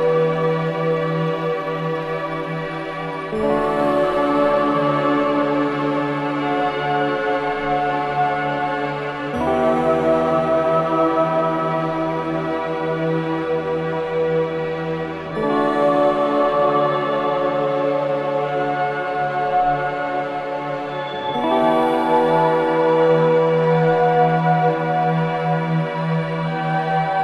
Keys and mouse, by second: 3.4-3.9 ctrl+alt+drag, 4.0-4.7 drag, 9.2-11.1 drag, 12.3-12.9 drag, 13.1-14.3 alt+shift+drag, 16.3-18.1 drag, 18.1-18.9 drag, 21.5 g, 21.9 x, 22.9 click, 24.1 i, 24.2 click, 24.6 space.